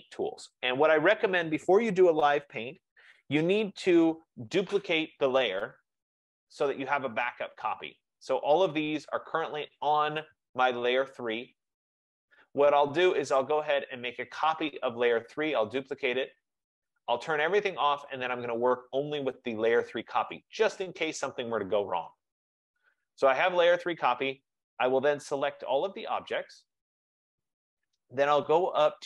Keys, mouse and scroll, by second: 8.3 click, 10.0 click, 13.8 click, 16.2 click, 17.6 click, 22.7 click, 26.7 click.